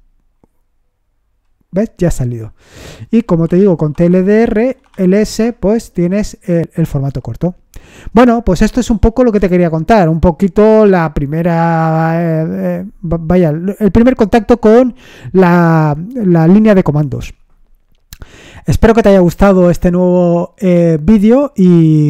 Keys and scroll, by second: 3.0-5.3 typing.